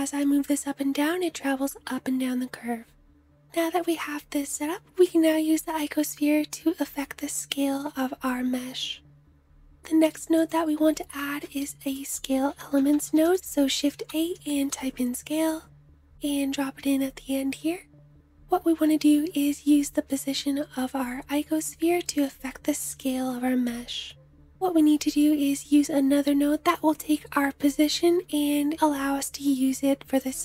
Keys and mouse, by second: 5.5 middle click, 5.7-10.4 middle drag, 10.7 shift+a, 17.4-26.6 middle drag.